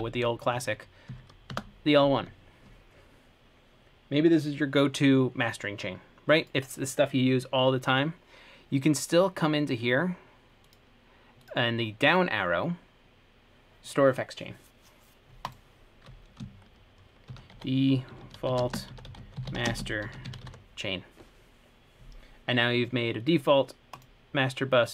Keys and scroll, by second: 0.0-0.6 typing, 1.3 Page_Down, 1.7 Return, 17.3-19.2 typing, 23.0 typing.